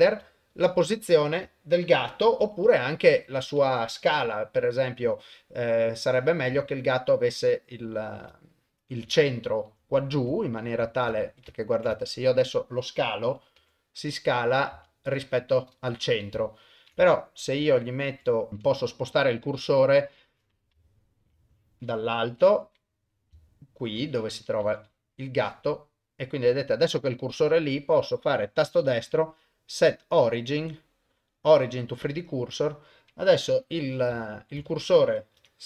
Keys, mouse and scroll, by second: 0.3 shift+middle click, 1.5 shift+middle click, 2.5 s, 7.2 middle click, 8.4 ctrl+middle click, 9.2 shift+middle click, 11.1 ctrl+shift+middle click, 11.6 ctrl+middle click, 11.9 shift+middle click, 12.3 middle click, 13.6 s, 16.5 ctrl+middle click, 17.1 shift+middle click, 18.3-19.4 middle drag, 19.6 KP_1, 21.0 shift+right click, 21.4 middle click, 22.3 KP_7, 23.5 shift+right click, 24.6 KP_1, 25.5-27.2 middle drag, 27.6-32.0 right drag, 32.0 middle click, 33.5 KP_1, 34.3 ctrl+middle click, 34.6 ctrl+shift+middle click, 35.4 KP_0.